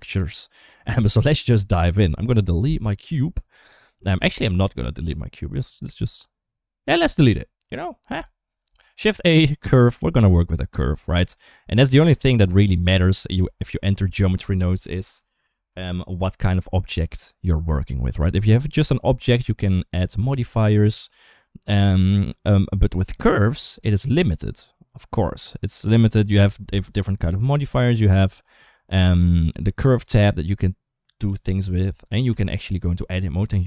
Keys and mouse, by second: 2.4 Delete, 4.2 ctrl+z, 5.0 shift+middle click, 8.0 Delete, 8.6 shift+a, 10.9 middle drag, 12.2 KP_Enter, 12.2 KP_2, 12.6 KP_1, 13.1 KP_7, 15.5-15.9 middle drag, 16.1 middle drag, 20.1 click, 22.8-26.3 drag, 27.8 click, 32.2 Tab.